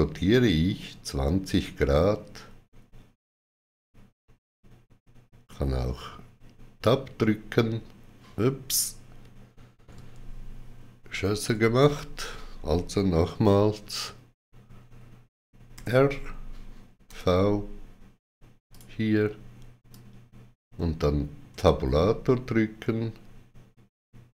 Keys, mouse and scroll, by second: 9.8 click, 11.0 ctrl+z, 15.6 ctrl+z, 15.6 click, 18.6 click, 19.8 click, 21.4 Tab.